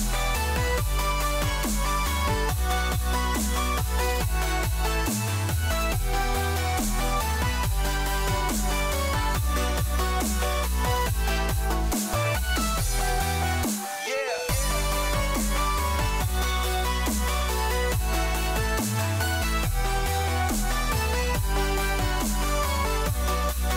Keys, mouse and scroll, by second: 0.3 s, 15.0 KP_Decimal, 23.0-23.7 scroll down 2.